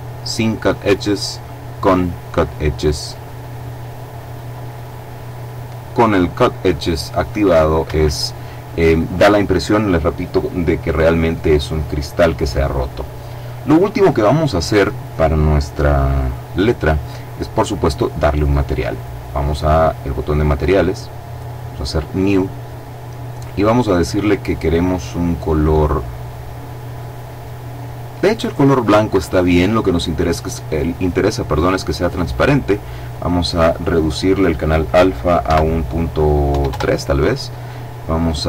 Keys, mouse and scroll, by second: 0.8 click, 2.6 click, 3.2 click, 4.2 click, 7.3 Escape, 18.4 click, 19.9 click, 20.9 click, 22.4-23.3 scroll down 2, 23.4-24.0 scroll up 2, 28.1-28.7 scroll down 1, 28.8-29.2 scroll down 1, 29.7 click, 31.5 click, 32.6 click, 34.8 KP_Decimal, 35.9 KP_3, 36.1 KP_Enter, 37.2-37.7 scroll down 2, 38.2 click.